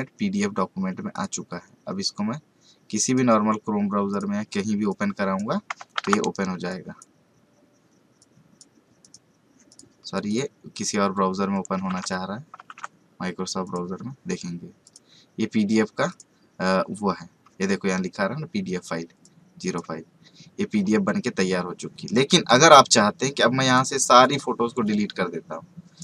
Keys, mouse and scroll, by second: 3.0 right click, 4.1 click, 5.9 alt+Tab, 6.7 click, 11.9 alt+Tab, 12.6 alt+Tab, 13.6 click, 16.7 scroll down 1, 19.2 click, 20.1 scroll down 1, 21.1 scroll up 1, 21.8 scroll down 1, 22.4-26.0 drag.